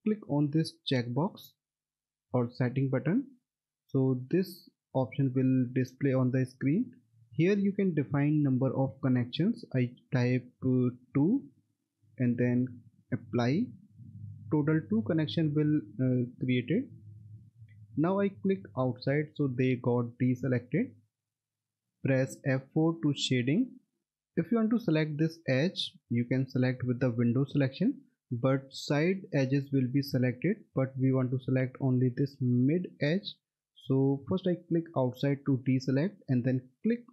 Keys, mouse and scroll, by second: 3.0 click, 6.6 click, 11.4 2, 13.3 click, 18.9 click, 21.7 middle click, 23.7 F4, 26.5 click, 34.7 click.